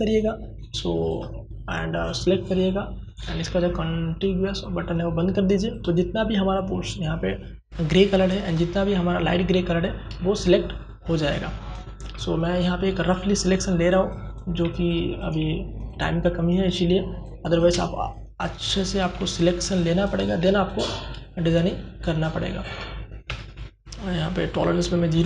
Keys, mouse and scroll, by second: 0.0 click, 3.4 click, 7.4 click, 9.1 ctrl+space, 9.3 ctrl+click, 9.6 ctrl+space, 9.9 ctrl+space, 10.2 ctrl+space, 10.6 click, 10.8 space, 11.5-13.8 ctrl+drag, 15.9 space, 16.1 ctrl+click, 18.1 ctrl+space, 18.2 ctrl+click, 18.6 ctrl+space, 18.9 click, 19.2 space, 19.6 ctrl+click, 24.1 click.